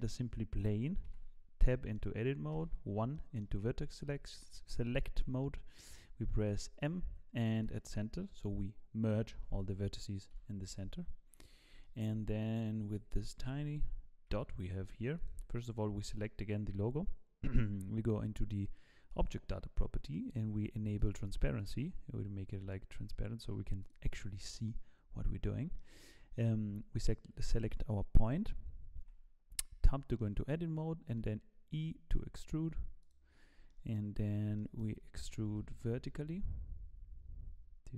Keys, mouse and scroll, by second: 1.1 Tab, 1.7 middle click, 2.5 1, 3.1 middle click, 7.7 m, 10.3 KP_1, 11.1-11.7 scroll up 3, 11.7-12.9 scroll up 5, 11.8 shift+middle click, 12.9 scroll up 1, 13.1 shift+middle click, 13.4 Tab, 14.3 g, 15.6 click, 19.1 click, 21.0 click, 23.1 click, 23.9 click, 24.9 click, 24.9-25.7 scroll down 1, 25.8 shift+middle click, 29.0 Tab, 29.8 shift+middle click, 31.1 e, 33.3-33.7 scroll down 4, 33.7 shift+middle click, 34.2 scroll down 2, 34.6 shift+middle click, 35.5 e.